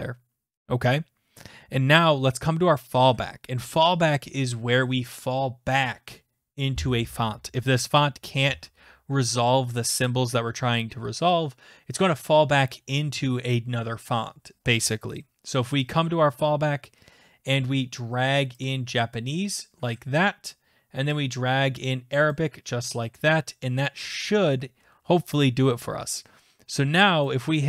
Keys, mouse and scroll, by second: 16.0 click, 19.6 click, 22.3 click, 24.8-26.8 drag, 27.0 click.